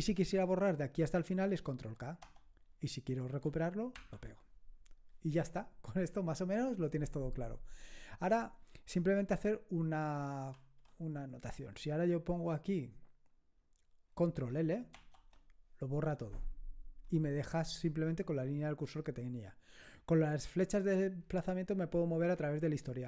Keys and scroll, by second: 2.2 ctrl+k, 4.0 ctrl+y, 10.5 ctrl+c, 15.0 ctrl+l, 22.3 Up.